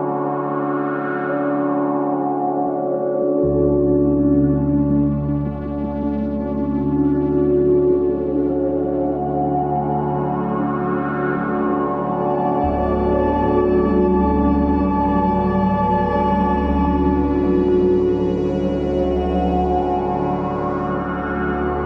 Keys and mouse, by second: 5.9-7.3 middle drag, 8.3-12.9 middle drag, 13.5 click, 14.4 shift+d, 17.3 s, 19.3 s.